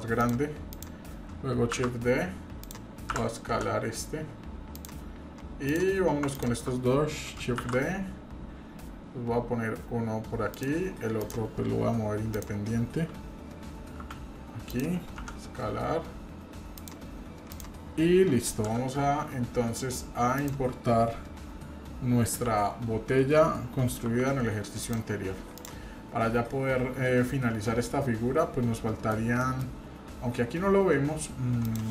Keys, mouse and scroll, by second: 0.7 click, 1.8 shift+d, 3.1 d, 3.5 s, 5.7 click, 6.4 shift+click, 7.6 shift+d, 11.2 click, 12.3 click, 14.0 g, 15.2 s, 17.5 click, 18.7 s, 22.4 f, 24.1 g, 25.5 click, 26.1 scroll down 2, 28.4-29.1 scroll down 3, 28.7 middle click, 29.4 middle drag.